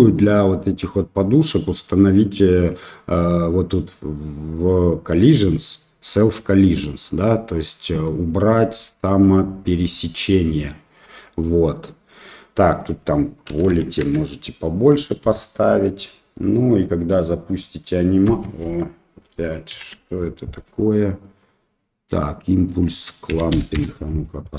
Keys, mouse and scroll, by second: 0.1 click, 6.7 click, 11.0-11.4 middle drag, 12.8-14.3 drag, 14.7 middle click, 15.2 space, 18.8 space, 19.7 shift+Left, 22.6-24.1 drag.